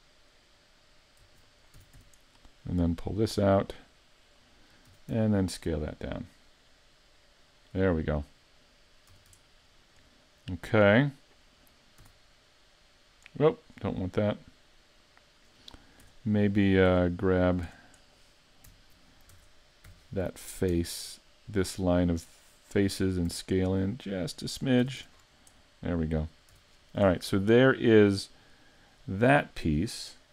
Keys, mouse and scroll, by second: 1.2 e, 1.8 s, 4.3 click, 4.9 s, 8.2 click, 9.1 a, 9.3 Tab, 9.7-10.1 scroll down 4, 10.1 middle click, 11.5 middle click, 12.0 s, 13.4 right click, 13.7-15.3 scroll up 3, 14.2 middle click, 16.1 Tab, 16.6 middle click, 16.9 Tab, 17.4 right click, 17.7 Tab, 19.3 ctrl+Tab, 21.5 alt+right click, 21.9 middle click, 23.3 s, 24.7 click, 24.8 a, 25.0 Tab, 25.2-25.6 scroll down 5, 25.6 middle click, 26.5 a, 26.7-27.1 scroll down 2, 27.1 middle click, 28.9 scroll up 4, 29.6 right click.